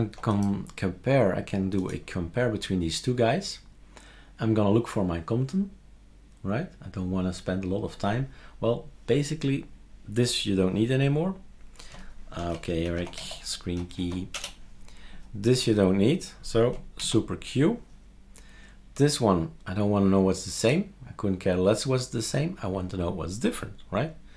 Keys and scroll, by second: 17.0 super+q.